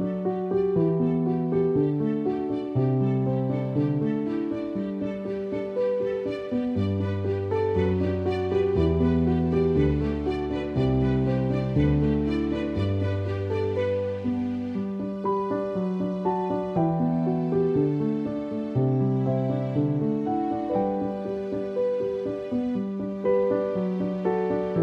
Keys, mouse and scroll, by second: 6.2 click, 9.0 shift+l, 10.4 shift+l, 11.5 click, 16.9 click, 17.9 b, 19.1-19.5 typing, 20.3 click, 24.1 click, 24.4 alt+click.